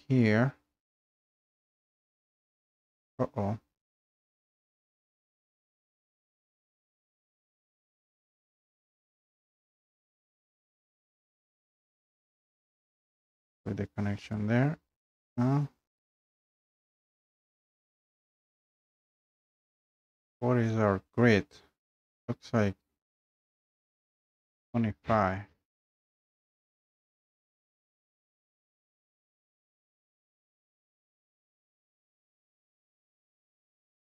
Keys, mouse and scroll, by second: 2.3 scroll, 4.5 Escape, 4.8-5.5 scroll down 2, 5.7 scroll down 2, 7.5 click, 9.6 click, 9.6 scroll, 11.7 scroll, 12.7 scroll down 2, 14.3 click, 14.8 scroll up 2, 15.0 scroll down 2, 15.7 scroll down 2, 16.2 scroll up 1, 17.0-17.4 scroll up 2, 20.4 scroll, 22.2 scroll up 4, 28.6 Escape, 29.4 Escape, 31.2 click, 32.9 click.